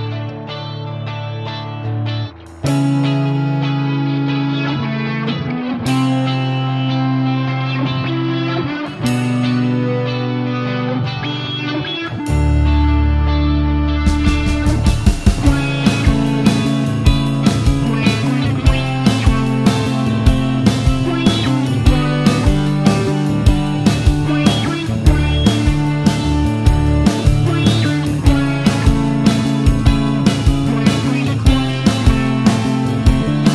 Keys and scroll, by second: 21.9 BackSpace, 23.7 BackSpace, 25.8 BackSpace, 28.8 super+c, 29.3 super+v.